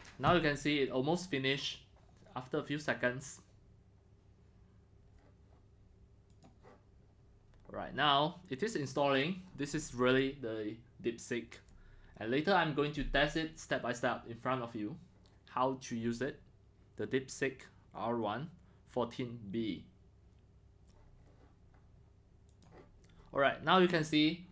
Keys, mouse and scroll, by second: 6.3-11.5 drag, 22.5-24.5 drag.